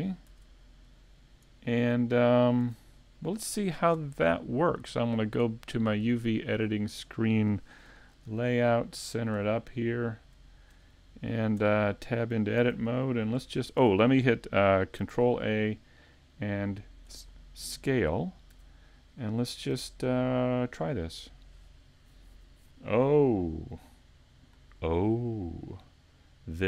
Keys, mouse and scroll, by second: 0.3 Tab, 1.7 middle click, 2.7 a, 3.2 right click, 5.0 click, 8.9 middle click, 9.5-10.1 scroll down 3, 9.9 middle click.